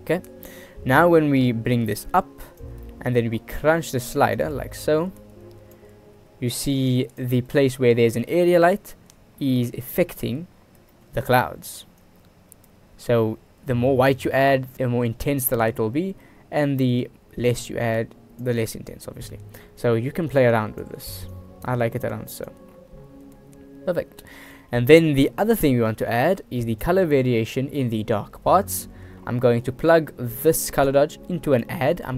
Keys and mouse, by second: 0.4 click, 1.9 click, 3.0 middle click, 4.5-5.9 drag, 7.1 click, 7.8 shift+drag, 8.5 shift+click, 11.1 shift+click, 12.2-14.7 drag, 15.7 shift+click, 16.8 click, 20.7 click, 21.5 click, 24.2 middle click, 24.6 middle click, 26.2 middle click, 26.6 shift+d, 30.6 click, 31.1-31.8 drag.